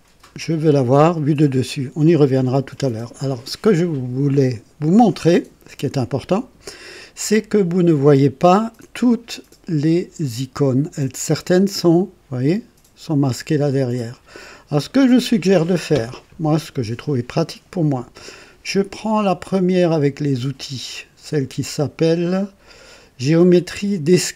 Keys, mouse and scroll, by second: 1.6 click, 11.7 click, 13.8 click.